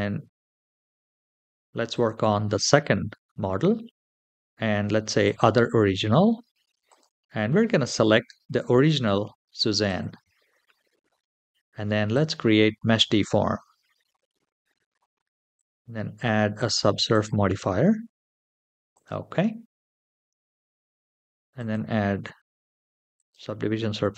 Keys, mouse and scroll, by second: 0.8-1.5 scroll up 2, 2.0 click, 5.0 click, 6.6-9.8 drag, 11.9 click, 14.6 scroll down 2, 15.3-19.0 drag, 19.6-21.3 scroll down 2, 21.3 click, 21.3 scroll down 1, 22.9 click.